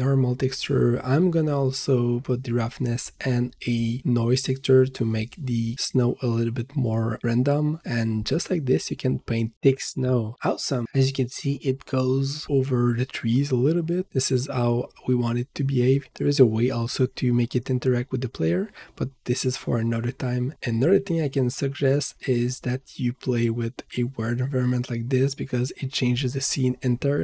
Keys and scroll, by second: 8.2 v, 23.9 ctrl+s.